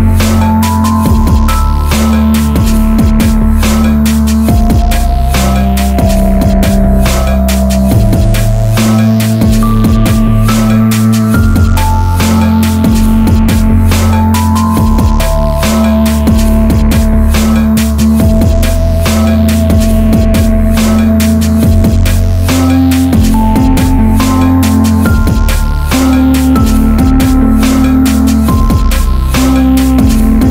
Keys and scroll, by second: 2.1 ctrl+r, 2.8 Escape, 7.0 alt+o.